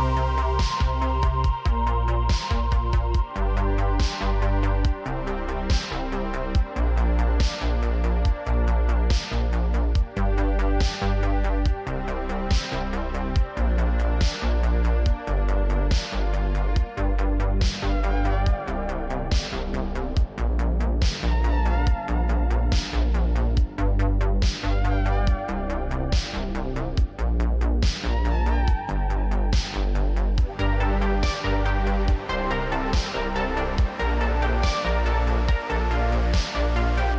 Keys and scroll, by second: 0.9 Tab, 1.3 ctrl+r, 3.2 j, 3.5 Tab, 18.7 ctrl+Tab, 20.2 a, 20.7 alt+g, 20.9 alt+r, 25.0 r, 25.1 z, 27.1 r, 27.2 z, 34.1 Tab, 34.8 ctrl+r.